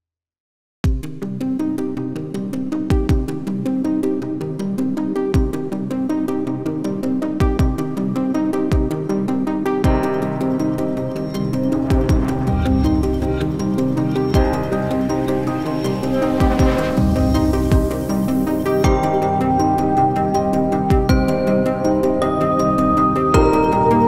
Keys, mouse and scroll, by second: 1.2-1.8 typing, 1.9 Return, 21.2 alt+click.